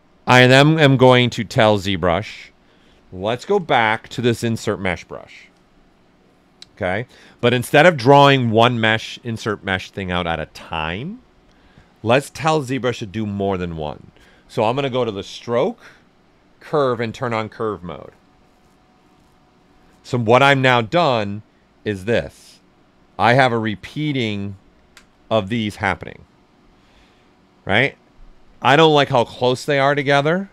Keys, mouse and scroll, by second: 0.1-1.7 drag, 1.7 alt+right click, 3.4 b, 5.5 click, 15.0 click, 21.7 click, 22.7 right click, 28.4 alt+right click, 29.7 ctrl+z.